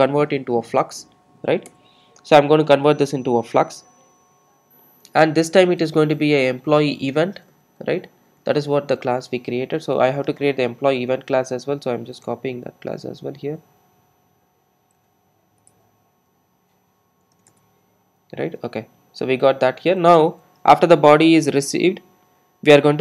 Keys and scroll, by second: 0.0 Return, 1.7 Return, 12.3 super+c, 13.4 super+c, 17.4 super+e.